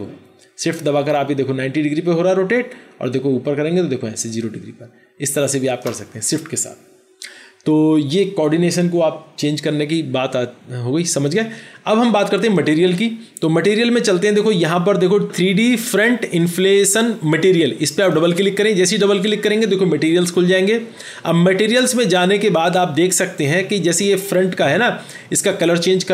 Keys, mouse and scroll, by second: 18.1 double click.